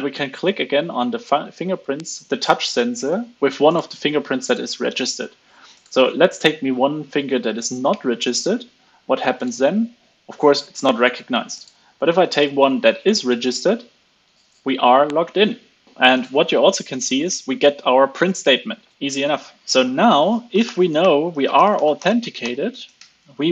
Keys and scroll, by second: 23.4 alt+8.